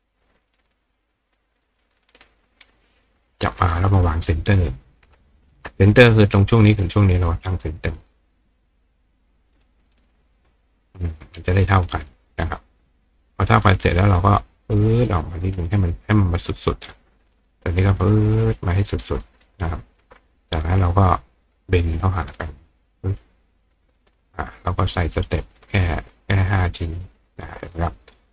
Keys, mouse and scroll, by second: 1.4 click, 2.0 click, 2.3 click, 3.1-4.1 drag, 5.4 shift+click, 7.6 click, 9.5 click, 10.5 click, 11.7 click, 12.1 click, 13.0 click, 13.8-15.6 ctrl+drag, 16.4-19.4 ctrl+drag, 19.2-21.2 ctrl+right drag, 22.1 click, 22.8 click, 25.3 click, 25.6 click, 25.8 click, 26.0 click, 26.2 click, 26.4 click, 26.7 click, 28.1-28.3 right drag.